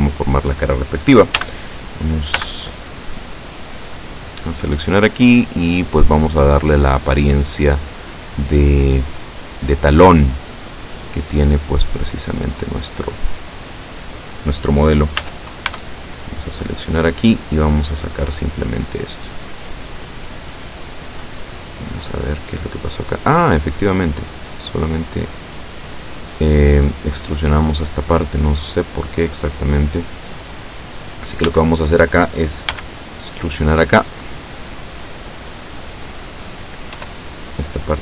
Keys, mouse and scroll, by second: 1.4 a, 2.4 b, 2.8 click, 4.0-6.8 drag, 7.2-8.8 drag, 9.3-10.7 drag, 11.1-13.0 drag, 15.3 a, 15.8 b, 16.2 click, 17.6-20.5 drag, 21.7-26.7 middle drag, 28.3-30.2 middle drag, 31.5 a, 32.8 b, 34.2-35.9 drag, 37.0 e.